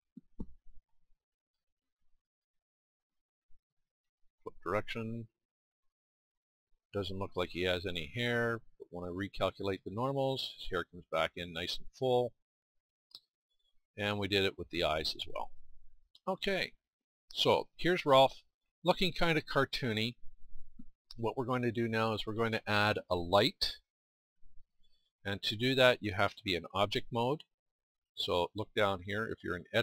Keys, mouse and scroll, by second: 1.5 Tab, 7.7-9.7 middle drag, 12.1 middle click, 12.6-14.6 middle drag, 16.5-24.3 middle drag.